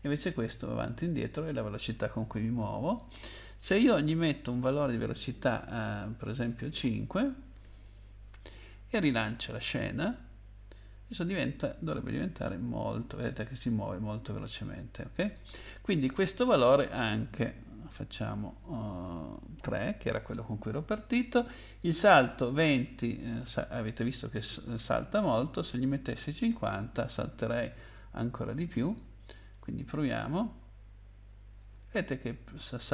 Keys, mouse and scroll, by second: 0.2 Up, 0.2 Up, 0.3 Up, 0.4 Up, 0.6 Down, 1.1 Down, 1.1 Down, 1.3 Down, 2.8 click, 4.6 click, 6.5 click, 7.5-7.9 typing, 9.3 click, 12.6 Up, 13.2 Up, 13.7 Down, 15.2 click, 16.9 click, 17.9 BackSpace, 19.5 3, 21.7 click, 25.6-27.1 typing, 28.8 click, 31.5 space.